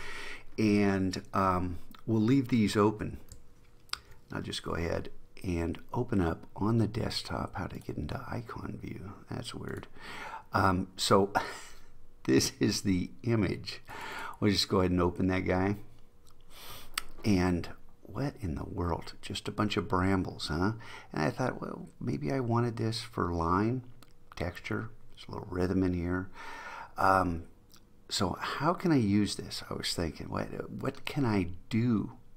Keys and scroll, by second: 4.0 super+o.